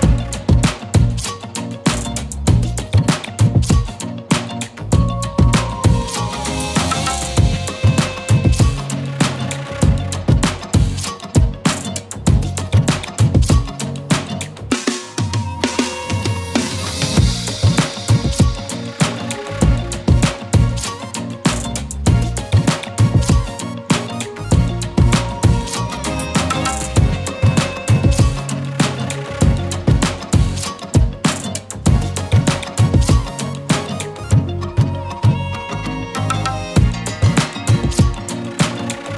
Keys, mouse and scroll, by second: 5.4 right click, 6.0 click, 7.8 scroll up 1, 8.2-15.0 typing, 8.6 click, 9.3-9.9 click, 10.0 click, 12.4-13.6 click, 13.2 click, 14.2 click, 14.4 click, 15.1 click, 17.5 right click, 18.3 click, 19.2 space, 19.3-20.2 click, 19.6 space, 20.3 click, 21.1 ctrl+c, 21.5 click, 24.3 click, 25.4 click, 28.2 ctrl+v, 30.7 click, 32.7-33.6 shift+click, 34.1-35.0 click, 37.6-38.5 z, 38.7 space, 38.8 click, 39.0 z.